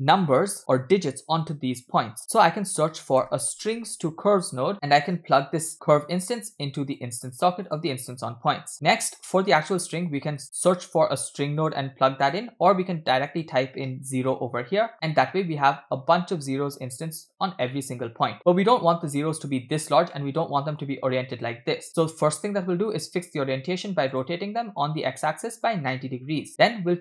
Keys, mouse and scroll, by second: 4.4 BackSpace, 6.0-7.1 drag, 7.7 click, 8.5 middle click, 8.7-9.7 scroll up 3, 10.4 shift+a, 13.3-14.6 drag, 15.4-16.2 middle drag, 16.4-16.8 scroll up 1, 17.7-18.4 middle drag, 20.2-20.9 middle drag, 22.0 middle click, 24.1 click, 25.6 click, 26.9 middle click.